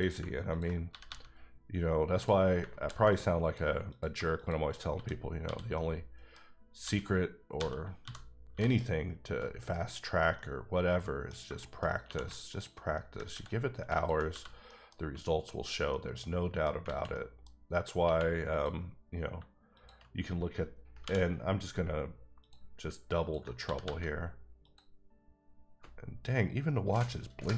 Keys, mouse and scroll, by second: 0.1 click, 0.9 g, 1.0 g, 2.1 click, 2.8 r, 3.1 click, 3.4 click, 3.9 click, 4.3 shift+click, 4.9 f, 5.4 f, 5.7 middle click, 6.8-8.5 typing, 9.5 right click, 10.3 middle click, 11.1-11.6 scroll down 2, 11.6 shift+middle click, 12.0 2, 12.5 alt+click, 12.9 middle click, 13.3 ctrl+x, 13.9 alt+click, 14.3 f, 14.6 middle click, 15.5 alt+click, 15.9 middle click, 16.7 scroll down 1, 16.9 alt+a, 17.1 middle click, 18.0 1, 18.5 click, 19.3 shift+click, 21.0 j, 22.4 click, 23.6 g, 23.8 g, 24.6 click, 25.2-26.5 scroll up 1.